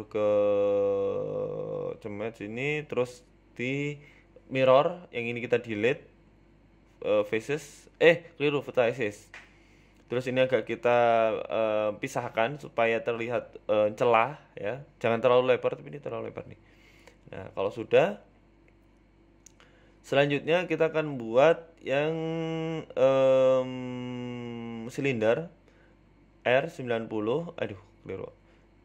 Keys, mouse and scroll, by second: 0.2 middle click, 0.9 Tab, 1.3 s, 4.0 KP_1, 4.3 scroll up 4, 4.5 shift+middle click, 5.3 click, 6.7 Tab, 7.1 click, 7.9 Delete, 9.3 ctrl+z, 9.8 Delete, 10.9 scroll down 1, 11.1 scroll up 2, 11.4 click, 12.8 shift+middle click, 13.6 g, 15.6-16.0 scroll up 11, 16.6 g, 18.5-18.9 scroll down 9, 18.9 shift+middle click, 19.2 scroll down 1, 19.7-20.1 scroll up 3, 20.1 scroll down 1, 20.5 shift+middle click, 22.7-23.1 scroll down 5, 22.9 middle click, 23.6 KP_3, 24.0-24.3 scroll up 3, 24.2 shift+middle click, 25.2 shift+a, 26.7-27.2 scroll down 3, 27.6 g.